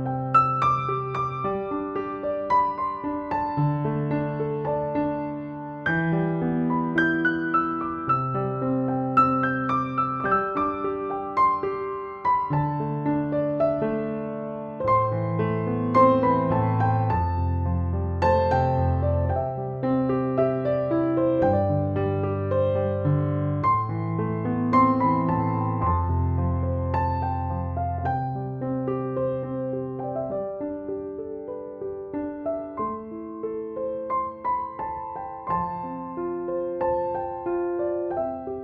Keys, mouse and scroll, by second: 0.4-1.3 drag, 4.5 space, 4.8 click, 5.0-5.4 space, 5.6 click, 5.9 x, 6.5-7.2 drag, 9.2 b, 9.8-10.5 click, 10.5-11.2 ], 12.2 ], 13.2-14.6 alt+drag, 17.0 ctrl+z, 17.4-18.9 click, 19.0 space, 19.2-19.8 click, 19.5 space, 20.0-20.6 space, 22.9 ctrl+space, 23.1 ctrl+-, 25.2 click, 25.5-26.3 ], 26.6 ], 26.7 ], 26.8 ], 26.8-28.4 drag, 29.0 right click, 29.9-34.7 drag.